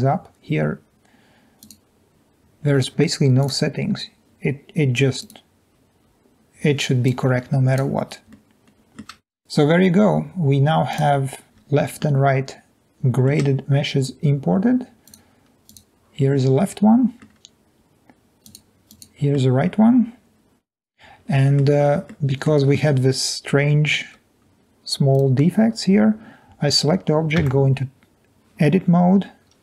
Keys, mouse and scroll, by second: 5.2 click, 7.0 click, 8.3-8.7 middle drag, 8.6 scroll up 1, 19.5-21.5 middle drag, 22.1-22.5 middle drag, 23.8 scroll up 2, 24.0 scroll down 1, 24.7 scroll down 1, 25.1 click, 27.5 Tab.